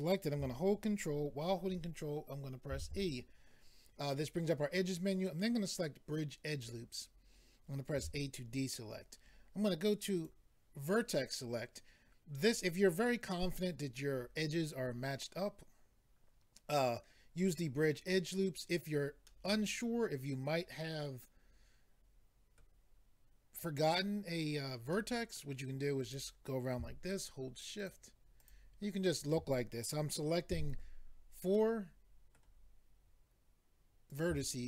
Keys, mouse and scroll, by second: 2.7 ctrl+e, 6.5 click, 8.0 a, 10.2 click, 19.3 middle click, 24.9 middle click, 26.0 click, 27.8 shift+click, 28.4 shift+click, 29.0 shift+click, 30.5 f, 31.5 middle click, 34.1 click.